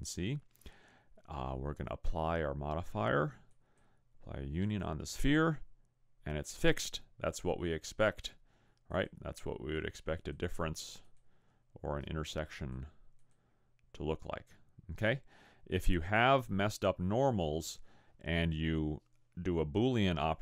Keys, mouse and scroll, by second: 3.5 click, 8.1 click, 10.2 click, 12.6 click, 15.1 click.